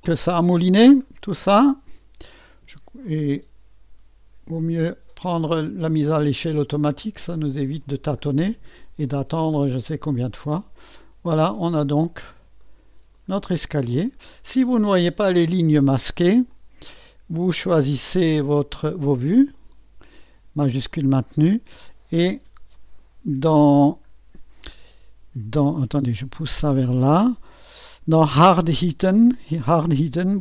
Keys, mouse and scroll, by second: 0.0-2.0 scroll up 1, 2.0-4.5 scroll up 1, 4.5-8.2 drag, 8.2-10.1 scroll up 1, 11.1-12.5 scroll up 1, 12.6-13.7 drag, 13.7-14.3 scroll up 1, 14.3-16.5 scroll down 1, 16.5-17.8 drag, 17.8 middle click, 19.5-22.4 drag, 26.2-30.4 drag.